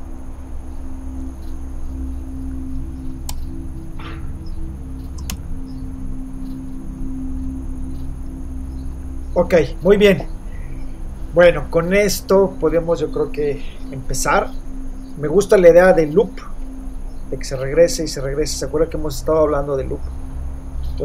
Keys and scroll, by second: 0.8 super+space, 3.3 Return, 5.3 super+0.